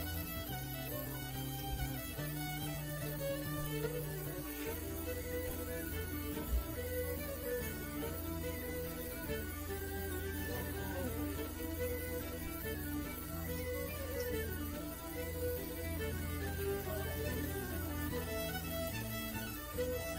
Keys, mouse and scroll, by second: 0.0 click, 0.9 click, 1.6 ctrl+middle click, 2.8 right click, 3.3 right click, 4.5 right click, 5.1 right click, 6.5 click, 7.8 right click, 9.0 right click, 9.7 right click, 10.9-13.4 right drag, 13.6 shift+middle click, 14.2 ctrl+shift+middle click, 15.0-16.8 ctrl+right drag.